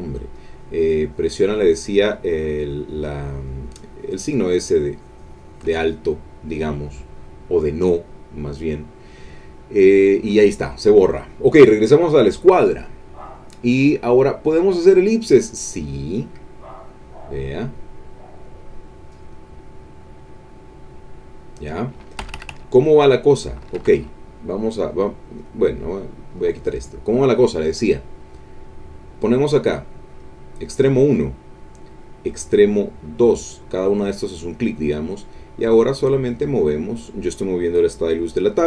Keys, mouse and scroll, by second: 0.3-5.8 drag, 12.1 click, 13.3 click, 14.4 click, 15.7-18.6 drag, 19.2 click, 22.2 Escape, 23.6 Escape, 25.4 click, 26.3 click, 30.1 click, 33.0 click.